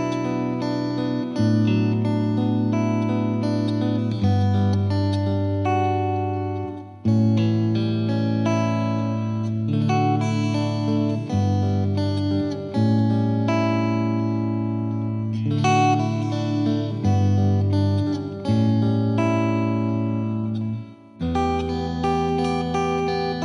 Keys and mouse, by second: 1.1 click, 1.9 click, 2.6 F2, 4.0 click, 5.1-6.4 drag, 6.6-7.8 drag, 11.4-13.6 drag, 15.3 click, 16.3 F3, 17.6 click, 19.3 click, 19.9 click, 20.7 F3, 22.7 F2.